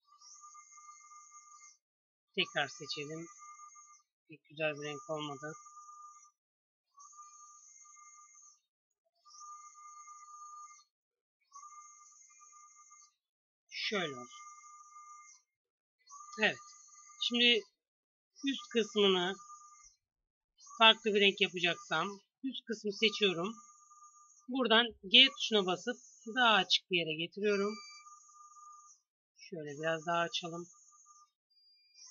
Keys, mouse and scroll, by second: 1.3 c, 8.4 c, 11.1 g, 12.9 g, 15.5 a, 16.2 c, 22.6-24.8 drag, 24.8 g, 27.3 Tab, 28.5 Tab, 29.1 g, 30.6 Tab, 31.5 a.